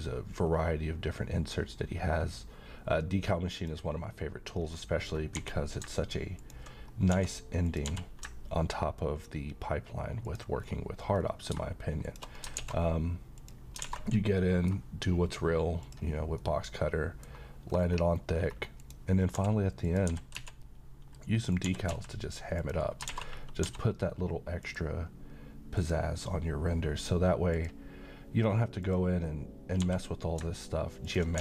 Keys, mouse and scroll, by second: 0.1-3.5 scroll down 1, 3.5 click, 4.5-5.0 scroll up 1, 5.4 g, 6.4 ctrl+click, 6.9 scroll up 1, 7.1 s, 7.7 click, 7.9 g, 10.3 ctrl+click, 10.6-11.5 scroll down 1, 12.0 shift+click, 12.5 alt+x, 13.4 click, 13.8 a, 14.1 scroll down 1, 14.4 middle click, 15.8 click, 16.3-17.3 middle drag, 17.7-18.3 scroll up 1, 18.8 click, 19.3 s, 19.8 click, 20.1 g, 20.4 z, 21.5 click, 21.6 g, 21.9 x, 22.6 click, 23.0 alt+a, 23.3-23.6 scroll down 1, 23.6 d, 24.6 click, 29.8 g, 31.1 ctrl+click, 31.3 s.